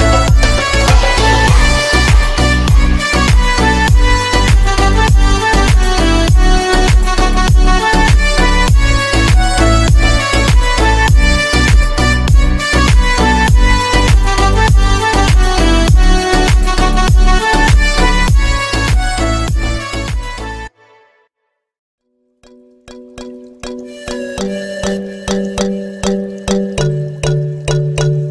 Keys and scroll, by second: 13.0 Delete.